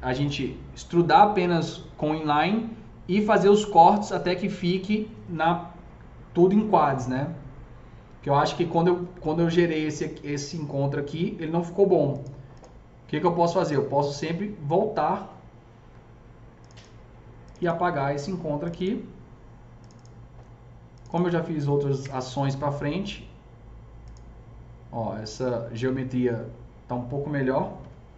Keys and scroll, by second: 21.9 ctrl+BackSpace, 27.8 KP_0.